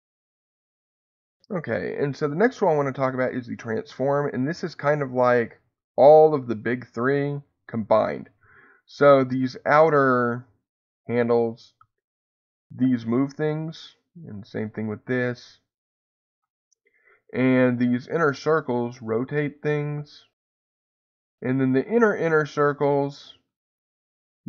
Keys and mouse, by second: 0.1 Escape, 3.5 click, 10.9-13.3 drag, 13.3 Escape, 14.6-16.3 drag, 16.3 Escape, 18.2-20.4 drag, 20.4 Escape, 22.6-24.4 drag.